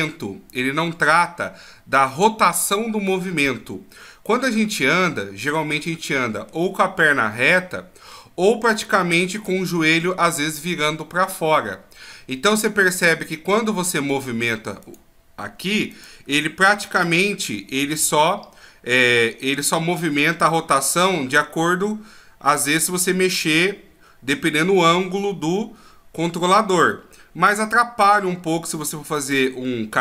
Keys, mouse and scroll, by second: 3.5 middle click, 5.9 middle click, 12.3 middle click, 14.9 right click, 15.9 right click, 16.7 g.